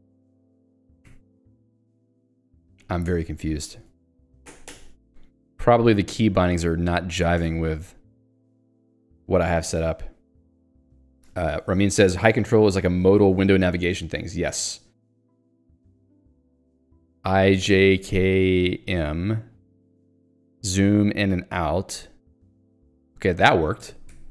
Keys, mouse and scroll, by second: 3.3 ctrl+g, 3.7 Escape, 7.4 s, 8.2 w, 17.5 j, 17.9 k, 18.6 m, 22.6 shift+z, 23.8 z.